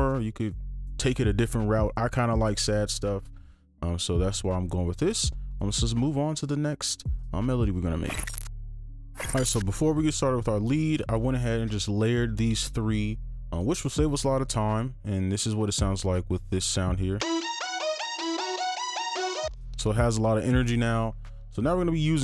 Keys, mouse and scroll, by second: 17.2 space, 19.4 space.